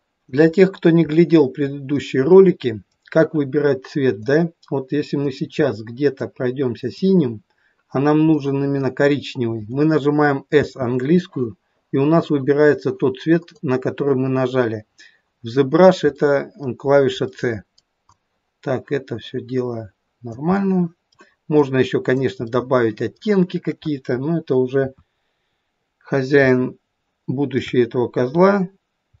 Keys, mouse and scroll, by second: 0.7-1.2 scroll down 2, 1.2 middle click, 2.4 middle click, 4.2 click, 6.4 click, 8.4 middle click, 8.6 middle click, 10.6 s, 13.7 click, 16.1 middle click, 17.3 middle click, 18.3 click, 20.5 middle click, 21.9 click, 22.5 middle click, 24.8 KP_1, 25.5-26.4 scroll down 1, 26.4 scroll down 1, 26.5 shift+middle click, 28.5-29.2 scroll down 1.